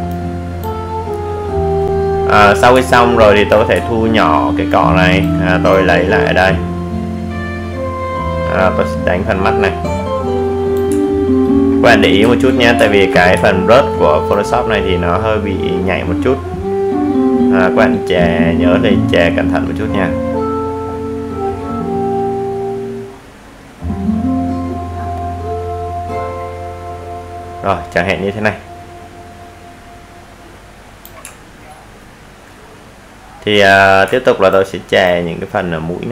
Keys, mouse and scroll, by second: 2.3-3.4 alt+scroll down 1, 3.6 ctrl+alt+z, 5.1-5.8 alt+scroll up 1, 5.8-15.5 drag, 22.7 alt+scroll down 1, 23.4-23.9 alt+scroll down 1, 23.9-24.2 alt+scroll up 1, 25.2 alt+right click, 26.1-36.1 drag.